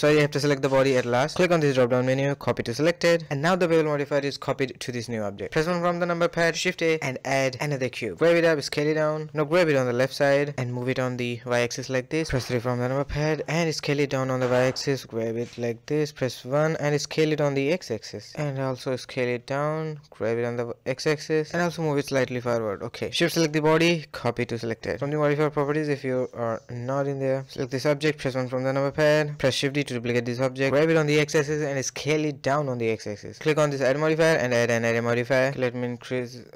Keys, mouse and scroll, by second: 0.2 shift+click, 1.4-3.4 drag, 3.4 middle drag, 4.2 click, 4.4 KP_1, 4.7 shift+middle click, 4.8 a, 5.0 a, 8.5 g, 8.6 s, 9.3 g, 10.0-11.1 middle drag, 11.1 g, 11.9 KP_1, 12.4 KP_3, 12.8 scroll up 2, 13.0 shift+middle click, 13.8 s, 14.8 g, 15.4 KP_1, 16.0 s, 17.0 g, 17.9-18.3 middle drag, 18.3 scroll down 1, 18.3 KP_1, 18.6 s, 19.1-19.8 middle drag, 19.8 g, 20.4-20.8 middle drag, 20.8 scroll down 2, 21.0-22.1 shift+middle drag, 22.1 s, 22.6 shift+click, 23.4-25.0 drag, 25.0 a, 25.1 a, 25.4-27.1 middle drag, 27.2 click, 27.8 KP_1, 27.9-28.7 scroll up 4, 28.7-29.5 shift+middle drag, 29.5 shift+d, 30.7 s, 31.4 g, 33.0-35.2 drag, 35.5-36.5 drag.